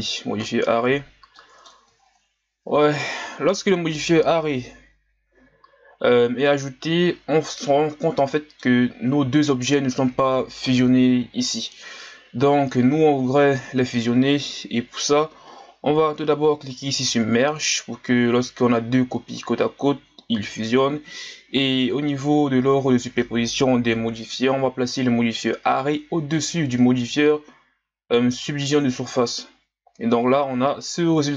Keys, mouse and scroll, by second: 1.4 middle click, 2.0-3.0 scroll up 6, 3.0-6.5 scroll up 4, 6.7-7.8 scroll up 1, 7.8-8.3 scroll up 3, 8.3-8.8 middle drag, 8.8-11.8 scroll up 1, 17.5 click, 21.8-24.9 drag, 25.4 click, 29.9-30.4 scroll down 1, 30.4-31.3 scroll down 3.